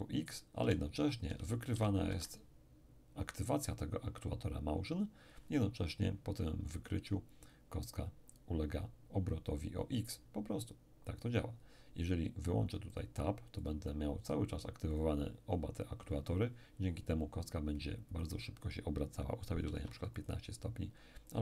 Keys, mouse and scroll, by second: 0.6 d, 1.2 d, 1.7 d, 2.1 Escape, 12.9-14.6 drag, 14.9 click, 18.1 click, 19.6 1, 19.7 5, 20.2 click, 21.3-21.4 drag.